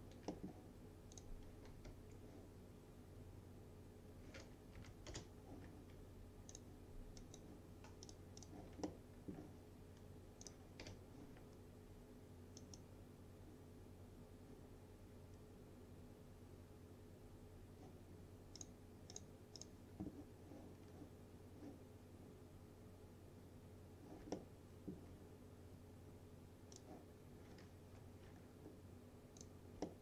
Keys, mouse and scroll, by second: 1.2 click, 1.9 u, 3.0-4.5 scroll down 1, 4.8 Down, 5.2 Return, 6.6 click, 8.9-9.5 alt+middle drag, 10.5 click, 10.9 u, 12.7 click, 18.6 click, 24.4-25.0 alt+middle drag, 26.8 click, 27.6 scroll up 1, 27.9 F4, 28.4-29.5 scroll up 1, 29.5 click, 29.9-30.0 alt+middle drag.